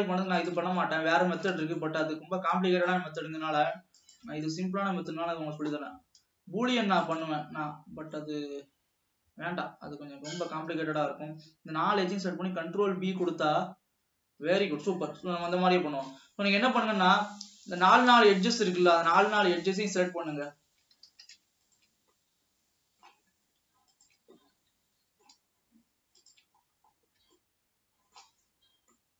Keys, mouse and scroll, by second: 0.4-0.8 shift+drag, 0.9-2.9 middle drag, 2.9-3.4 scroll up 3, 4.0 shift+click, 4.7-6.2 middle drag, 6.2 scroll up 1, 7.2 shift+click, 7.6-8.2 scroll down 6, 8.4-11.7 middle drag, 12.2 ctrl+b, 15.7-16.7 shift+middle drag, 16.7-17.3 scroll up 3, 17.9 shift+click, 18.4-20.4 middle drag, 20.4 shift+click, 21.3 ctrl+z, 21.8 shift+click, 22.3-24.0 middle drag, 24.0 shift+click, 24.5-26.2 middle drag, 26.2-26.6 shift+drag, 26.8-27.3 scroll down 4, 27.6-28.8 shift+middle drag, 28.8 scroll up 2, 29.0-29.1 middle drag.